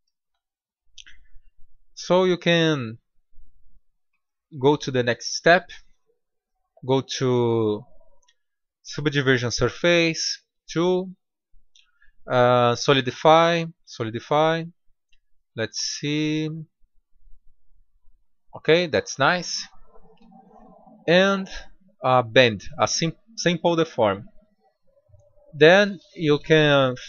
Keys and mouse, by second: 2.4-2.8 drag, 4.0 drag, 4.2-4.8 middle drag, 5.0-6.7 drag, 9.8-13.3 drag, 15.1-15.5 middle drag, 16.0 middle click, 17.1-18.8 drag, 19.0-22.6 drag, 24.9 drag.